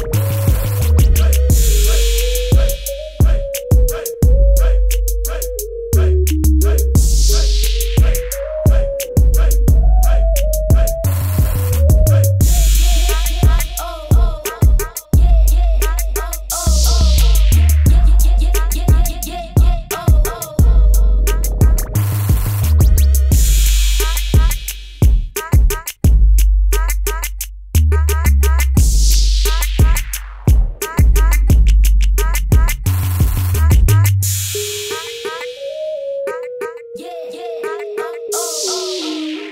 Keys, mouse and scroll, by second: 0.4 click, 0.9 click, 2.1 shift+click, 2.8 click, 3.7 KP_Enter, 4.2 click, 4.5 right click, 5.3 click, 6.5 right click, 9.4 click, 11.5 right click, 12.8 Escape, 13.1 right click, 15.7 click, 16.5 right click, 18.1 click, 19.9 ctrl+KP_0, 21.4 click, 23.5 Tab, 24.5 -, 25.3 click, 29.3 right click, 31.1 click, 34.9 ctrl+t, 35.8 click, 36.9 click, 37.5 KP_Enter, 37.9 ctrl+KP_0.